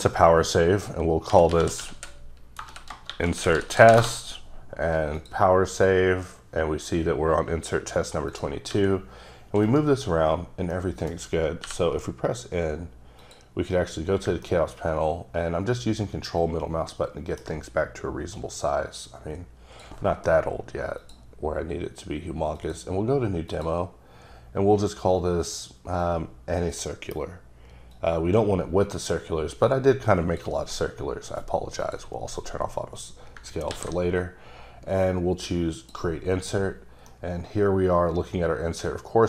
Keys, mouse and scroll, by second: 1.3-3.9 typing, 4.0 Return, 5.2 click, 5.8 click, 7.4-8.3 scroll up 3, 8.3 click, 8.8 g, 9.7 right click, 10.2 scroll up 1, 10.5 scroll down 1, 10.8 middle click, 11.7 n, 13.2 click, 14.5 ctrl+middle click, 18.3 click, 21.0 click, 22.6 click, 23.5 click, 28.0 click, 31.8 click, 33.7 s, 35.0 click, 36.8 scroll down 3, 37.1-38.7 middle drag.